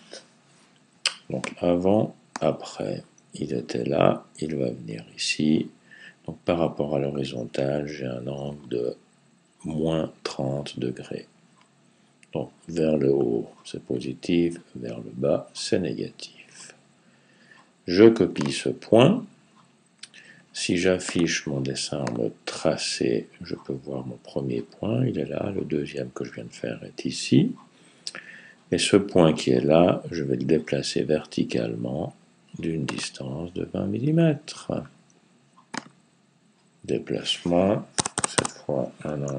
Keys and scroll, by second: 38.8-39.3 typing.